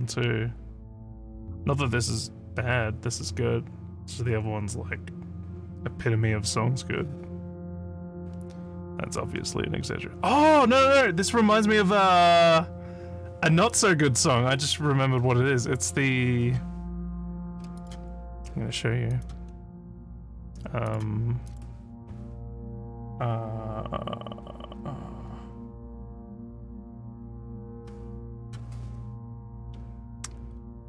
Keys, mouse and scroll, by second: 17.8 click, 19.1 click, 20.1 click, 20.9 click, 21.5 click, 28.4 click.